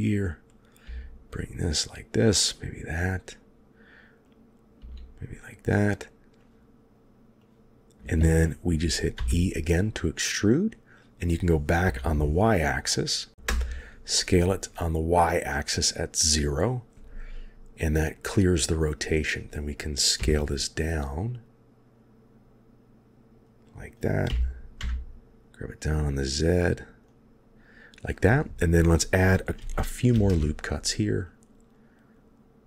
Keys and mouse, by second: 0.5 click, 0.7 g, 4.4 click, 4.7 g, 6.4 click, 7.5 click, 9.0 e, 13.3 s, 20.1 s, 24.2 g, 30.0 ctrl+r.